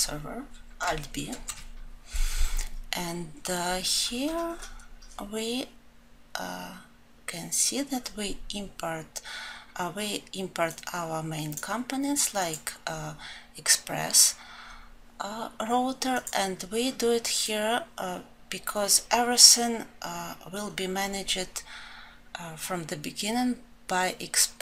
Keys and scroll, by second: 1.6 ctrl+b.